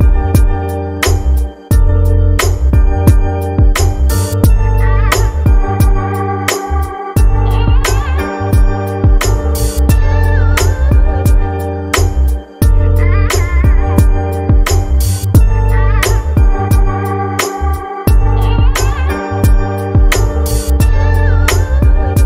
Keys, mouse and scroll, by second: 13.4-15.6 drag, 15.8 click, 17.6-22.0 drag.